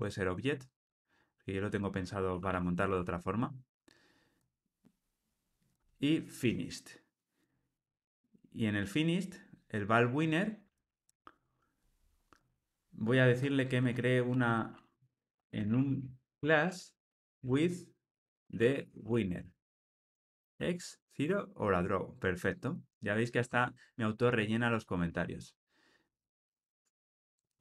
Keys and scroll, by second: 2.9 Tab, 21.2 Tab, 26.7 Tab.